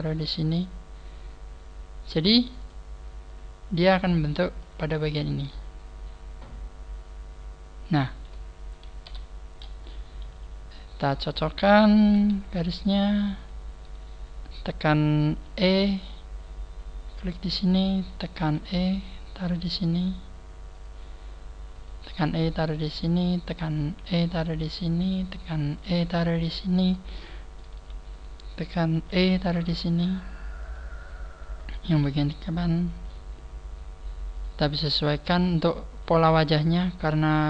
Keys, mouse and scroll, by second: 0.2 click, 2.5 click, 2.7 click, 3.0-3.9 scroll down 2, 3.9-4.3 scroll down 2, 9.5 scroll up 4, 10.9 right click, 11.5 right click, 12.1 g, 12.7 click, 13.3 right click, 13.8 g, 14.5 right click, 15.6 e, 18.1 click, 18.1 right click, 18.5 e, 20.9 click, 22.0 e, 23.7 click, 23.7 right click, 24.0 e, 25.2 click, 25.7 right click, 25.9 e, 26.7 click, 27.1 shift+middle click, 28.1 shift+middle click, 28.1 right click, 29.0 e, 30.9 click, 31.6 right click, 32.0 e, 33.2 click, 34.3 right click, 34.7 g, 35.3 click, 36.1 right click, 36.2 g, 37.3 click.